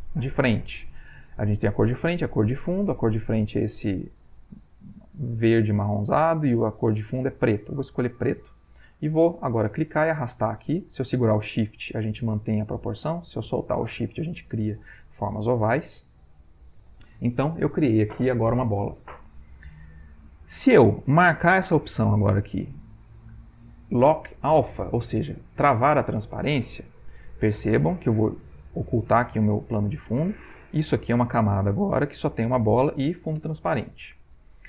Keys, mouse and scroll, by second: 9.7-17.2 drag, 23.0 click, 29.1 click.